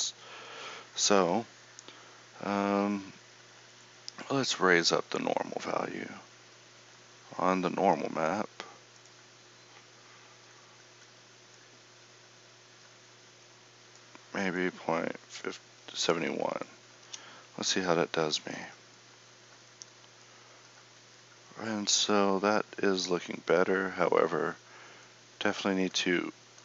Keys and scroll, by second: 1.3 Escape.